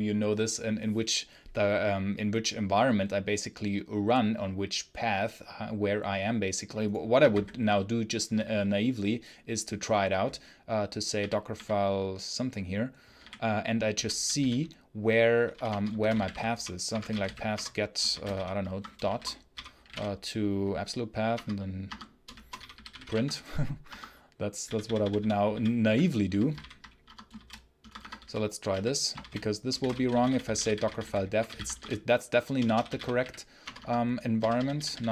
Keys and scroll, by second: 7.0 Escape, 7.2 b, 11.0 w, 11.4 w, 13.0 w, 13.8 j, 14.0 j, 15.1-19.4 typing, 18.5 Escape, 21.3 Return, 21.7 Escape, 21.9-23.4 typing, 23.7 Escape, 24.5-35.0 typing, 26.9 Escape, 27.7 Escape, 33.6 Escape.